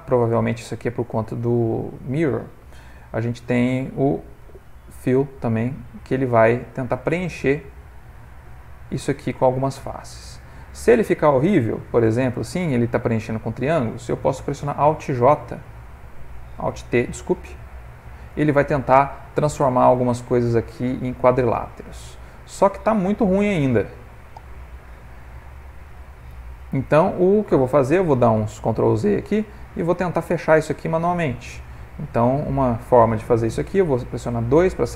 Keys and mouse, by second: 0.5 middle click, 2.8 ctrl+f, 5.5 middle click, 6.4 ctrl+middle click, 6.9 middle click, 9.0 middle click, 9.5 ctrl+middle click, 10.3 middle click, 13.0 middle click, 15.8 alt+j, 17.0 alt+t, 18.5 middle click, 19.4 middle click, 23.9 alt+t, 26.7 alt+j, 27.2 middle click, 28.6 ctrl+z, 29.3 ctrl+z, 30.5 ctrl+z, 34.4 2, 34.7 click.